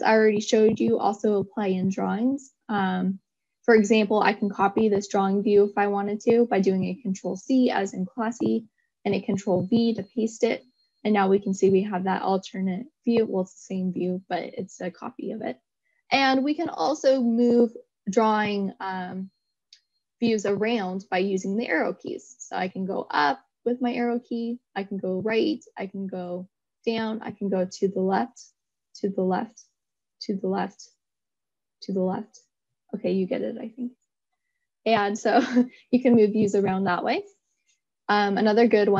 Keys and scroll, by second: 4.9 ctrl+c, 8.7 ctrl+v, 23.3 Up, 25.4 Right, 26.2 Down, 28.3 Left.